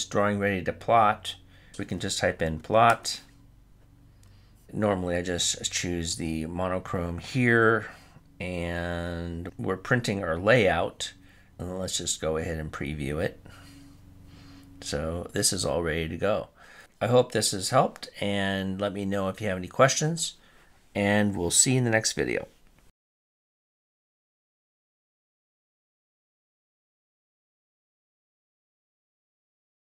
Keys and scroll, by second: 1.5 typing.